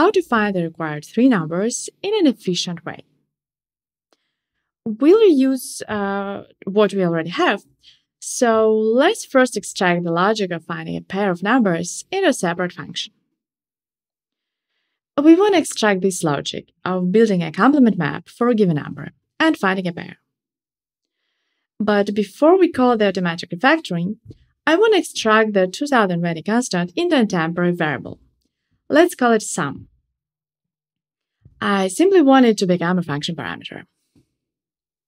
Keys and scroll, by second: 25.6 alt+Up, 29.1 alt+super+v.